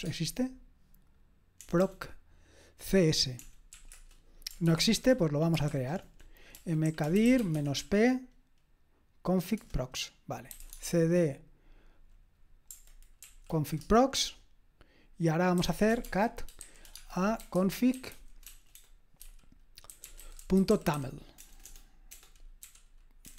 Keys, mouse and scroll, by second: 0.0-0.4 typing, 1.6 BackSpace, 1.8 BackSpace, 3.4-3.7 typing, 3.9 Return, 4.6 ctrl+p, 4.9 ctrl+a, 5.7 typing, 6.6 alt+d, 6.9-8.3 typing, 10.3-11.1 typing, 13.2 Right, 13.8 Return, 15.4-23.3 typing.